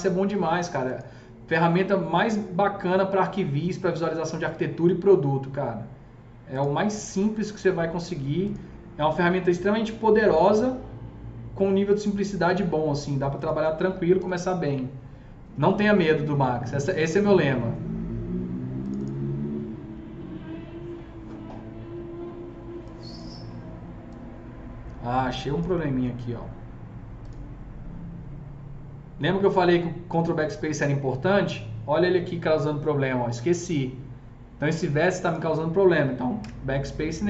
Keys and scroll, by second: 13.9 F3, 14.1 F3, 14.2 F4, 36.4 BackSpace.